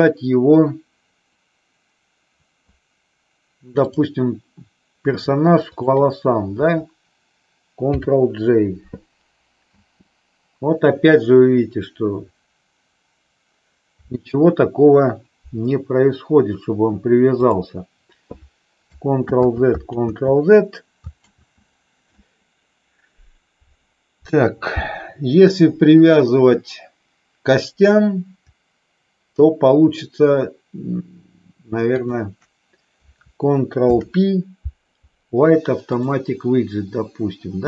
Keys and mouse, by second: 3.8 click, 7.9 ctrl+j, 9.8 space, 17.4 click, 19.3 ctrl+z, 19.9 ctrl+z, 21.3 ctrl+z, 31.8 shift+click, 33.7 ctrl+p.